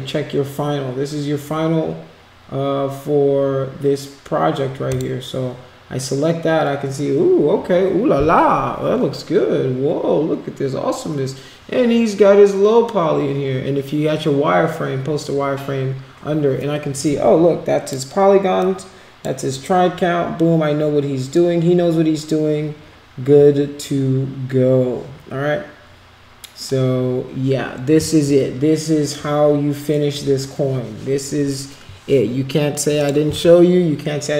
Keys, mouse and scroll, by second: 4.9 click, 17.0 click, 18.6 click, 33.0 click.